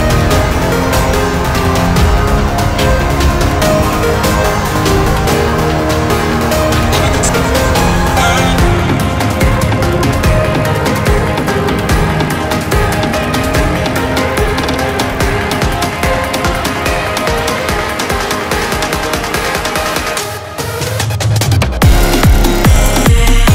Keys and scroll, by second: 9.0 ctrl+t.